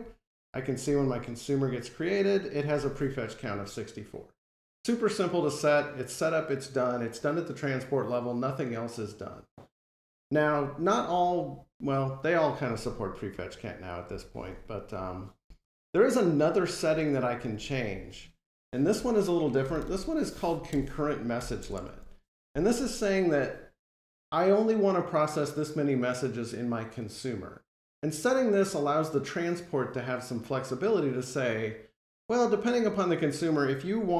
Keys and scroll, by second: 20.5 Return.